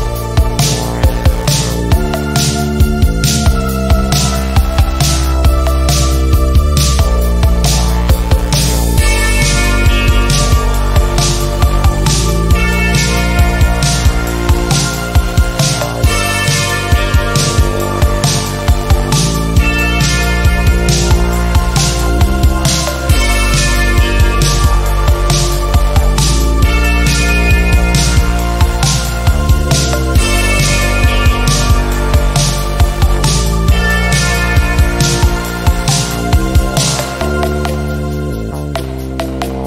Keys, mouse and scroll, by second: 2.0 Delete, 2.9 r, 3.4-5.0 drag, 5.8 v, 6.4 shift+click, 7.5 click, 10.8 click, 13.0 shift+click, 15.1-18.4 drag, 19.3 ctrl+z, 19.6-22.5 drag, 24.1 click, 27.7 click, 33.8 ctrl+scroll down 1, 36.1 b.